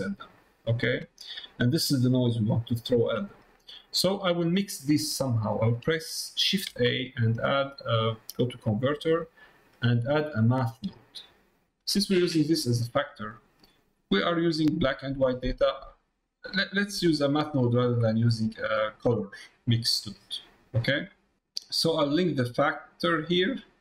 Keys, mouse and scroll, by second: 0.7 middle click, 1.3-2.5 drag, 3.2 middle click, 4.1 middle click, 5.4 middle click, 15.6 middle click, 16.6 click, 17.3 middle click, 18.0 middle click, 18.9 middle click, 20.2 middle click, 21.2 middle click, 22.3-23.8 drag.